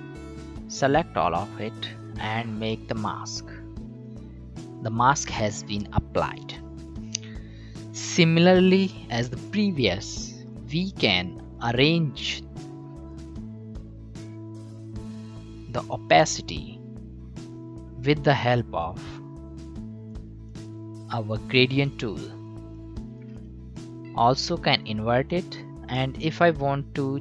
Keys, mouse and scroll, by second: 10.5 click, 15.4-22.4 drag, 24.8 click.